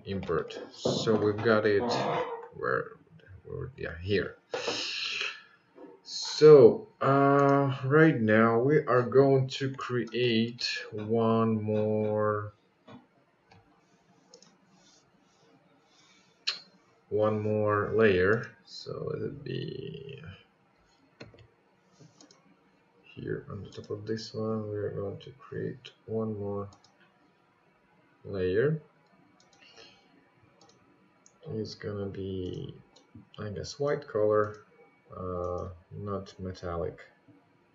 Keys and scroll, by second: 17.2 ctrl+z.